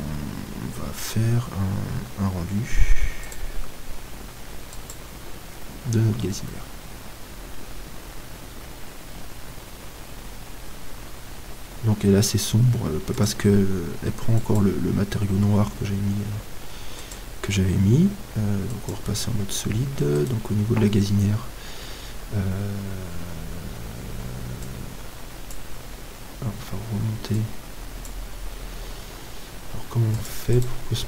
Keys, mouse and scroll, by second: 3.3-5.3 drag, 15.0 click, 17.3-19.3 drag, 19.8 middle click, 20.2-24.7 right drag, 24.7-26.3 drag, 28.1-29.7 drag.